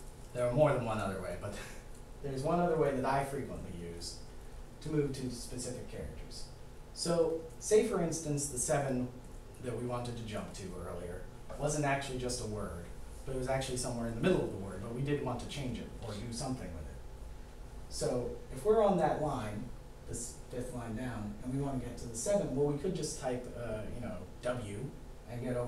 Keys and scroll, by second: 4.7 5, 6.5 Down.